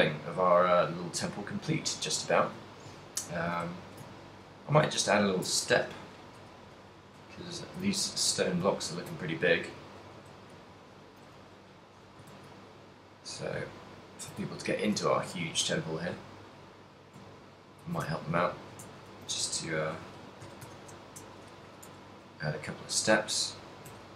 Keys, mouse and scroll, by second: 0.1 middle click, 2.9 shift+middle click, 3.1 ctrl+middle click, 3.8 shift+middle click, 4.2 ctrl+middle click, 4.9 Tab, 5.6 Tab, 5.8 right click, 6.5 KP_3, 6.8 z, 7.4 shift+middle click, 7.8 ctrl+middle click, 8.1 a, 8.8 shift+middle click, 9.5 ctrl+middle click, 10.4 shift+a, 11.5 shift+c, 13.1 shift+a, 13.9 ctrl+middle click, 14.7 shift+middle click, 15.2 ctrl+middle click, 15.6 g, 17.9 ctrl+click, 18.2 shift+middle click, 18.5 ctrl+middle click, 18.8 Tab, 19.2 s, 21.8 g, 23.0 click.